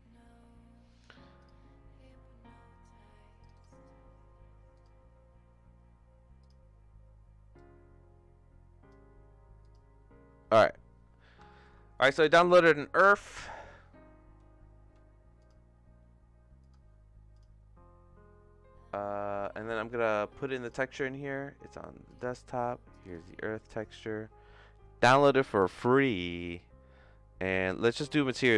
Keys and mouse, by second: 11.5 shift+middle click, 13.1-16.9 drag, 17.4-19.8 drag, 26.0 click, 27.8 click.